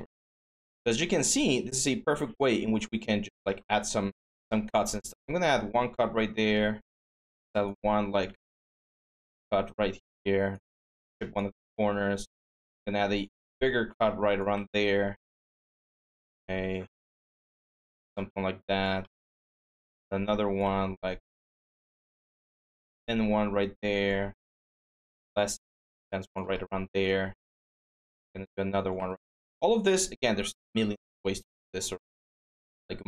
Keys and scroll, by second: 4.8 ctrl+d, 11.4 ctrl+d, 17.2-18.0 typing, 19.2 ctrl+d, 24.2 ctrl+d, 27.0 ctrl+d, 32.6 ctrl+z.